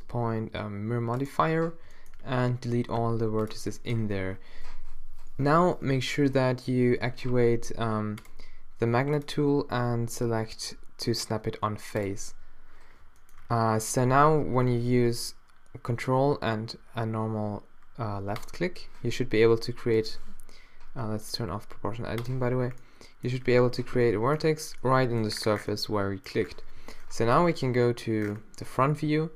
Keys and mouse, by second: 3.0 x, 4.0 middle click, 13.4-16.0 drag, 18.4 click, 19.1 g, 23.8 -, 24.4 middle click, 26.8 z, 27.1 middle click, 27.6 middle click, 28.4 middle click, 29.1 z.